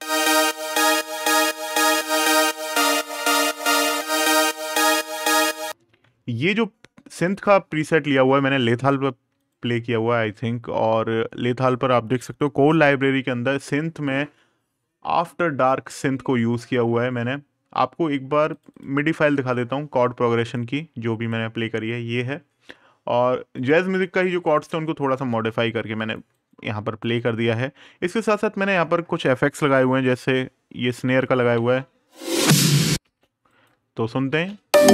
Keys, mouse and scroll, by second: 4.8 click, 7.1 click, 12.5 super+KP_Add, 15.6 super+KP_Subtract, 18.3 click, 23.3 click, 25.8 right click, 28.4 click, 30.8 right click, 31.3 space, 33.2 right click, 34.0 space.